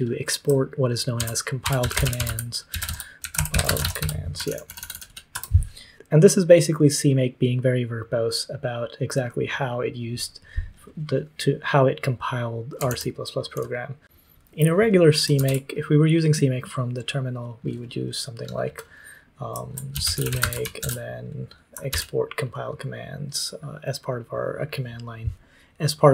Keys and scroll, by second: 1.1 ctrl+t, 1.3-5.8 typing, 12.8 super+;, 13.5 super+l, 14.0 ctrl+c, 14.0 ctrl+w, 14.0 super+l, 15.3 ctrl+w, 19.6-22.3 typing.